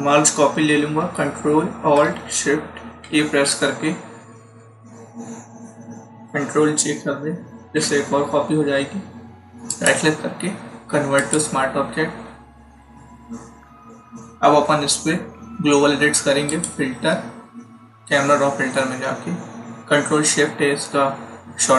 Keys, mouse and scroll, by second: 2.9 ctrl+shift+e, 7.5 ctrl+j, 9.6 right click, 11.1 click, 16.4 click.